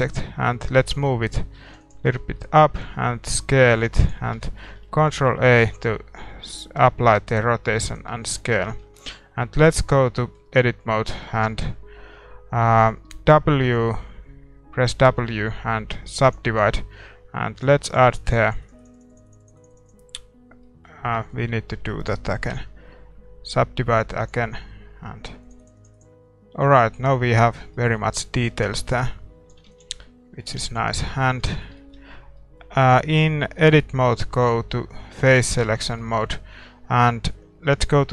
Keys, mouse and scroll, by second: 0.9-3.6 drag, 2.1-4.4 middle drag, 3.2 s, 6.8-7.9 middle drag, 7.9 ctrl+a, 8.3-16.3 middle drag, 8.8 Tab, 16.3 w, 17.6-24.3 drag, 20.6-24.3 middle drag, 21.0 a, 21.5 a, 24.3 w, 25.5-27.7 drag, 26.5 a, 26.7-31.6 middle drag, 27.2 Tab, 28.8-30.9 drag, 30.0 ctrl+s, 30.9 ctrl+s, 31.3 Tab, 34.4-36.2 drag, 35.4-37.4 middle drag, 37.4 click.